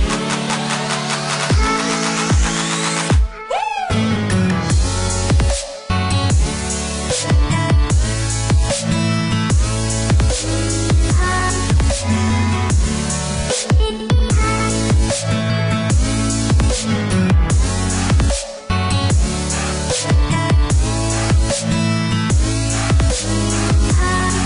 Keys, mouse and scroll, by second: 3.9 KP_6, 4.1 KP_0, 4.6 KP_Enter, 7.1 click, 8.0 space, 9.0 click, 9.7 click, 12.3 KP_1, 12.6 KP_5, 13.0 KP_Enter, 15.0 click, 15.9-16.5 scroll up 1, 16.5 click, 17.3 scroll down 1, 18.4 click, 19.8 space, 20.7 click, 21.3 scroll up 1, 22.1-23.3 scroll down 1, 23.3 click.